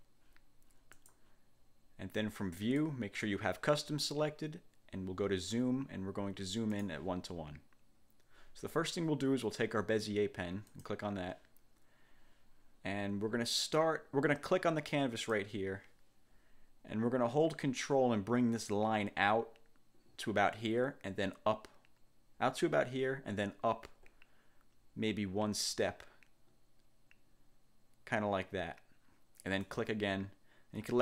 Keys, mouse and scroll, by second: 1.1 click, 2.7 click, 6.9 click, 10.9 click, 15.3 click, 29.7 ctrl+click.